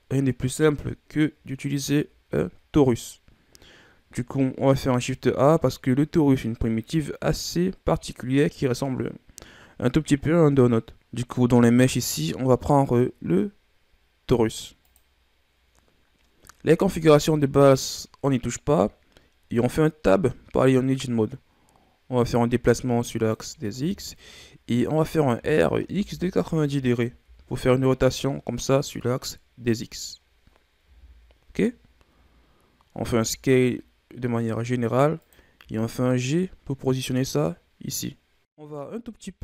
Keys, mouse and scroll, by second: 0.7-1.7 scroll down 2, 1.7-3.7 ctrl+scroll up 2, 4.8 shift+a, 11.0 shift+a, 20.2 Tab, 22.4-23.8 drag, 23.8-24.5 ctrl+scroll down 3, 24.5-25.1 scroll up 3, 25.5 r, 28.8 scroll down 2, 29.0-31.0 middle drag, 31.0 KP_1, 32.1-32.5 shift+scroll down 1, 32.5 scroll up 2, 33.2 s, 35.8 g, 38.2 scroll up 1.